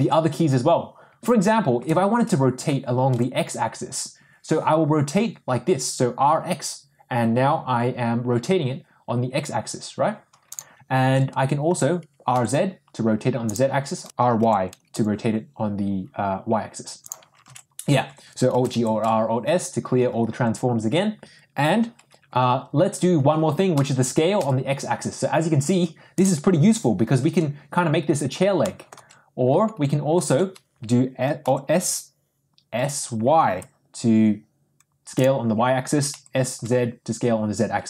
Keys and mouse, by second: 1.7 r, 11.0 ctrl+z, 12.0 r, 14.0 r, 14.1 x, 14.9 r, 17.4 ctrl+z, 18.5 alt+g, 18.7 alt+r, 18.9 alt+s, 23.9 s, 28.8 middle click, 30.3 ctrl+z, 31.4 s, 36.1 s.